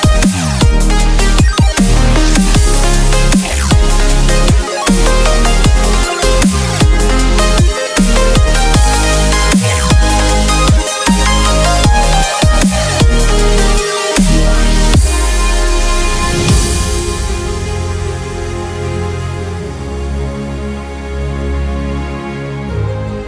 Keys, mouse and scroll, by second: 1.5 Tab, 2.2 click, 2.9-4.9 middle drag, 4.9 ctrl+t, 6.4-7.4 middle drag, 7.6 middle click, 7.8 middle click, 7.9 middle click, 9.4 middle click, 9.7 click, 10.1 middle click, 11.9 middle click, 12.9-14.5 middle drag, 14.3 Tab, 15.8-17.1 drag.